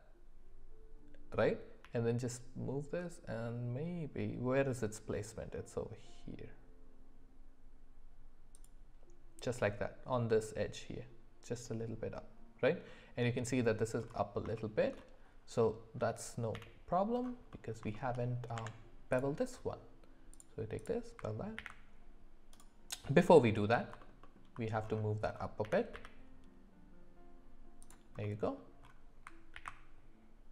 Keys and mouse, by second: 2.9 g, 14.6 shift+middle click, 15.6 middle click, 16.5 f, 17.5 middle click, 17.9 shift+middle click, 18.6 Tab, 20.4 click, 21.6 ctrl+b, 24.2 middle click, 25.6 g, 28.2 middle click, 29.6 ctrl+b.